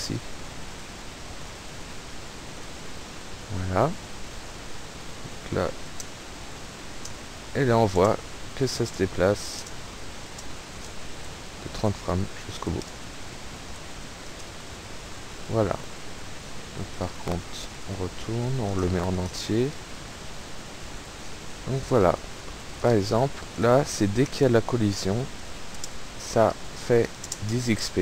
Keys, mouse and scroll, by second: 0.3 click, 0.7 click, 1.5 click, 2.7 click, 4.9 p, 5.4 space, 7.0-10.4 typing, 11.5 Right, 12.1 Left, 12.5 Right, 12.8 space, 13.1 Left, 13.6 Up, 13.7 Right, 14.0 Left, 14.3 space, 14.7 Escape, 17.0 click, 17.9 click, 18.7 click, 19.2 click, 22.9 click, 23.7 click, 25.0 p, 25.8 space, 27.3 space.